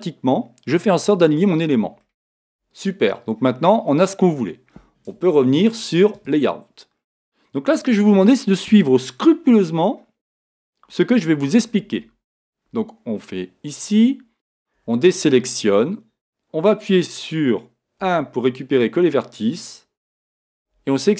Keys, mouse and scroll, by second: 0.7 middle click, 2.5 Tab, 3.5 middle click, 4.1-5.2 scroll up 1, 6.3-12.7 drag, 12.7 Tab.